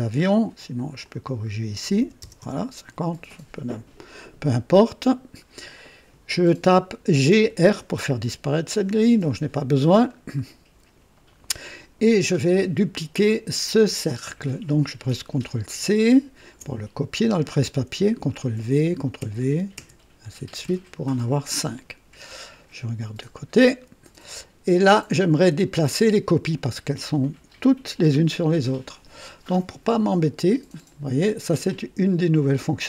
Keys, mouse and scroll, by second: 0.1-0.4 scroll down 1, 1.0 click, 2.0 KP_5, 2.2 KP_0, 2.4 Return, 4.0-5.4 drag, 7.2-7.6 typing, 9.8-10.2 scroll down 1, 9.9-10.7 typing, 10.3 right click, 14.0 click, 15.8 ctrl+c, 18.5 ctrl+v, 19.2 ctrl+v, 19.8 ctrl+v, 20.6 ctrl+v, 23.5 click, 24.4 click, 25.6 click, 32.3 click.